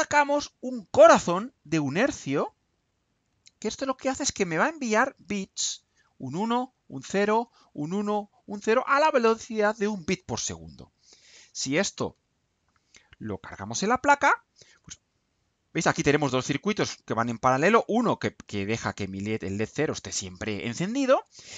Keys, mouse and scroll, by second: 2.2 click, 4.8 click, 5.9-7.4 drag, 12.0 ctrl+u, 17.8-20.6 middle drag.